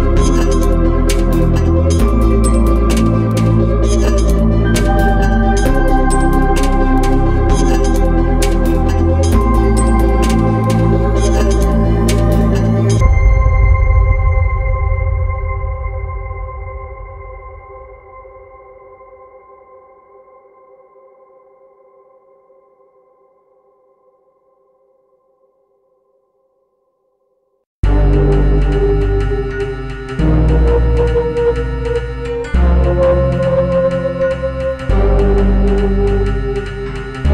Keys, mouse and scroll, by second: 1.3 click, 1.5-2.0 scroll up 1, 2.0 Escape, 2.3 middle click, 3.5 l, 4.1 x, 6.6 click, 8.9-9.4 scroll up 1, 9.4 Escape, 9.9 click, 10.1 x, 10.5 scroll up 1, 10.7 Escape, 11.9 click, 14.4-14.8 scroll down 1, 15.2 click, 20.7 click, 21.4 middle click, 22.5 click, 27.9 click, 28.4 Escape, 30.2 right click, 31.5 click, 36.6 click.